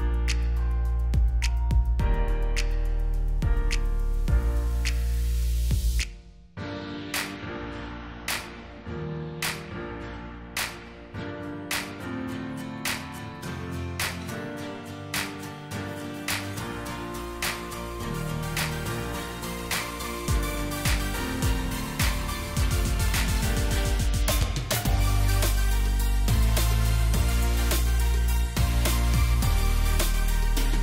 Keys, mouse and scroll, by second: 0.5 double click, 0.7-1.3 scroll up 2, 3.3 scroll up 1, 3.9 shift+click, 4.7 shift+click, 5.5 Delete, 6.8 alt+scroll up 1, 7.4 right click, 8.2 double click, 9.3 shift+click, 10.0 shift+click, 14.0 Delete, 15.7 shift+click, 18.5 double click, 24.5 ctrl+g, 25.2 alt+click, 26.2 shift+click.